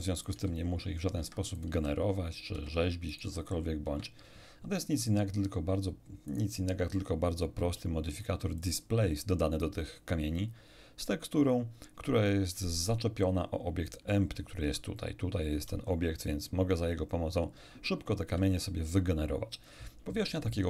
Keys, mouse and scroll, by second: 0.3 click, 0.3 g, 1.2 Escape, 1.5 right click, 1.7 g, 2.5 Escape, 3.1 right click, 3.3 g, 3.9 Escape, 6.3 right click, 8.6 click, 13.9 right click, 14.6 r, 18.3 Escape.